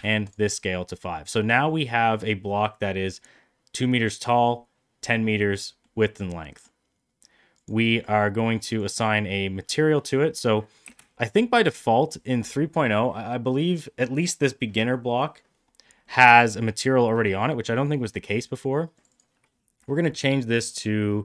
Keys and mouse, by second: 0.9-1.4 middle drag, 1.6-2.0 middle drag, 5.7-6.5 middle drag, 8.6 click, 8.9-10.1 drag, 10.8 z, 15.9-16.2 middle drag, 18.9 click, 19.0-21.2 drag.